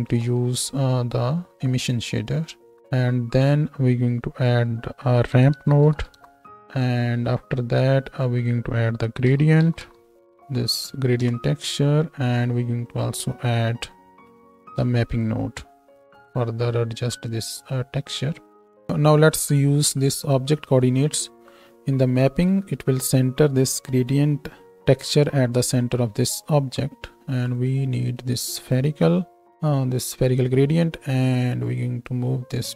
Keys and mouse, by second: 0.0 shift+s, 2.7 shift+e, 3.4 middle click, 3.6 right click, 4.4-6.7 middle drag, 6.7-8.3 right drag, 8.3-12.6 middle drag, 12.6 right click, 12.8 middle click, 13.0-15.1 ctrl+right drag, 13.9 ctrl+t, 15.1 middle click, 15.2-20.1 shift+right drag, 15.8 shift+e, 20.1 middle click.